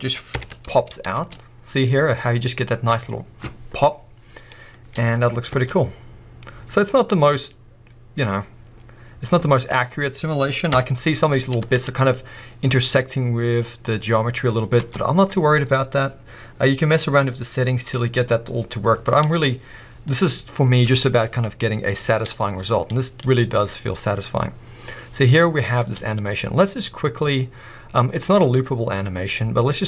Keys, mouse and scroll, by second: 0.3 shift+Left, 0.9 scroll up 2, 1.1 space, 4.8 space, 5.1 scroll down 1, 5.5 space, 9.4 space, 9.9 scroll down 2, 10.7 shift+Left, 11.4 scroll up 2, 11.6 space, 13.1 scroll down 2, 14.8 space, 15.3 scroll down 1, 15.4-16.1 scroll up 1, 19.1 scroll down 1, 22.4 space, 25.9 space, 28.4-29.8 drag.